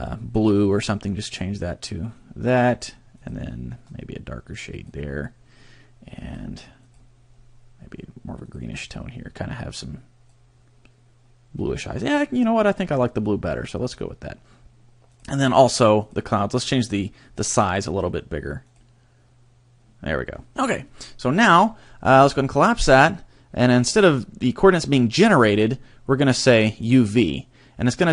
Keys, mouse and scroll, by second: 2.8 click, 3.3 click, 6.3 click, 6.9 click, 15.1 click, 16.0 click, 17.7 click, 18.7 click, 22.2 click, 25.5 click.